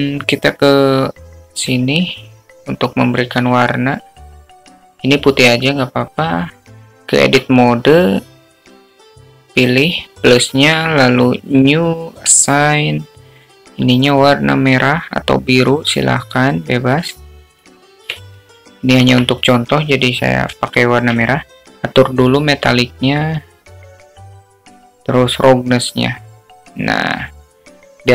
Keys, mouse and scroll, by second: 0.0 click, 5.1 click, 9.4 Tab, 10.9 click, 13.2 click, 14.4 click, 21.1 Tab, 24.4-26.0 drag, 27.3-28.1 drag.